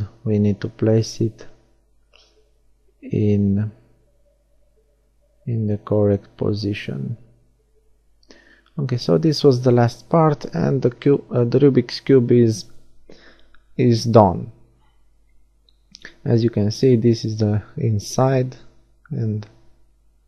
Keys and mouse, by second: 3.8 middle click, 5.9-8.8 middle drag, 6.9 g, 8.8-10.4 drag, 10.6-12.0 middle drag, 10.6 g, 12.0 click, 13.3 z, 14.1 click, 14.7-15.7 middle drag, 17.1-19.8 middle drag, 19.6 a.